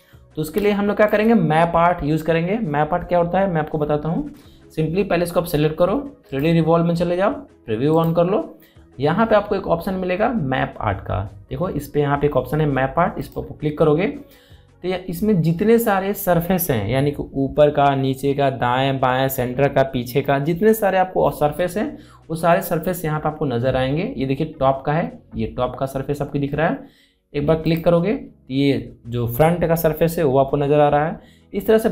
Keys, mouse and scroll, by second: 1.3 space, 1.4 click, 1.8 space, 7.1 click, 14.0 click, 28.4 click.